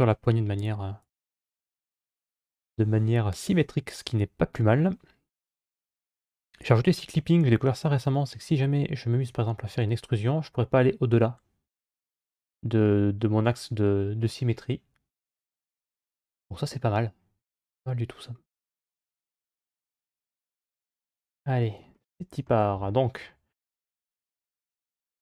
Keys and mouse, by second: 0.8 click, 9.1 e, 20.0 3, 21.1 middle click, 22.6 middle click.